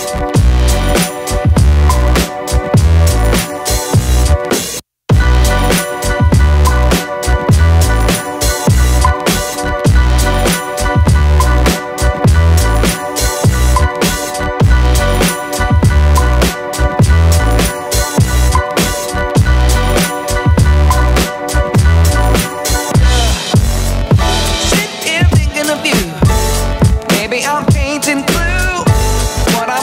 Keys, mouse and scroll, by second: 0.9-1.6 alt+middle drag, 2.1-2.5 alt+drag, 2.5-3.2 alt+middle drag, 3.3-3.6 alt+drag, 3.8 alt+click, 4.2 alt+middle click, 5.2 click, 6.3-6.8 drag, 7.4-8.2 drag, 8.6 click, 9.4-10.6 drag, 13.1-18.6 drag, 20.3 middle click, 22.3 drag, 22.9 click, 24.2 middle click, 24.9 drag, 25.6 click, 26.8-27.4 drag, 28.0-28.3 drag, 29.0-29.6 drag.